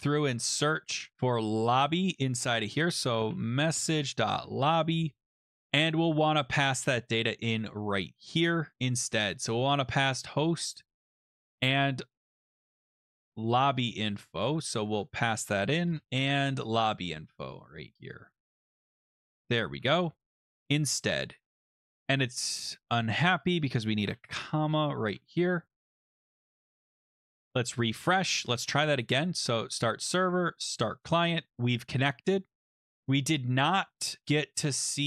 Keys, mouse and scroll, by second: 0.0 Delete, 0.4 Delete, 0.8 Delete, 1.1 Return, 1.7 click, 2.5 click, 2.8-4.9 typing, 5.9 click, 6.4-7.1 scroll, 7.7-8.9 scroll, 9.9-10.3 scroll down 6, 11.1 click, 11.3 ctrl+c, 11.4 scroll down 2, 13.2 click, 14.1 Return, 14.1 middle click, 14.3 ctrl+b, 14.9 ctrl+v, 15.9 Return, 16.4 middle click, 16.5 middle click, 18.1 click, 18.4 ctrl+c, 18.5 middle click, 18.9 click, 18.9 middle click, 19.3 scroll, 19.3 ctrl+v, 19.6 ctrl+s, 23.5 click, 24.1-24.7 typing, 26.9 click, 27.5 click, 29.0 click, 29.7 click, 30.8 click, 32.6 click, 34.2-34.9 scroll down 4.